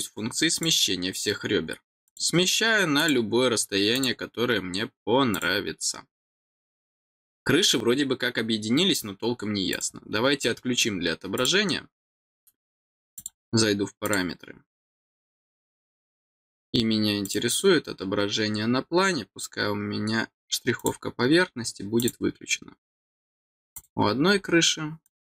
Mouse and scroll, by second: 0.5 click, 2.0 click, 3.0 click, 3.9 click, 5.3 click, 9.7 click, 11.3 click, 13.1 click, 14.0 click, 17.2 click, 18.1-18.7 scroll down 3, 19.4-19.9 scroll down 1, 20.8 click, 22.0 click, 23.7 click, 25.0 click.